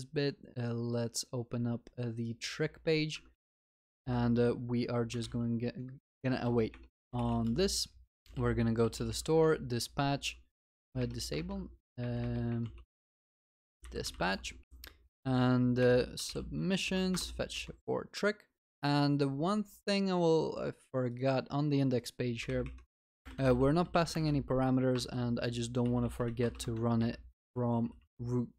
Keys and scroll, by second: 3.2 Tab, 6.0 Tab, 9.4 Return, 11.3 Return, 13.0 ctrl+BackSpace, 14.6 ctrl+v, 15.8 ctrl+BackSpace, 18.4 Return.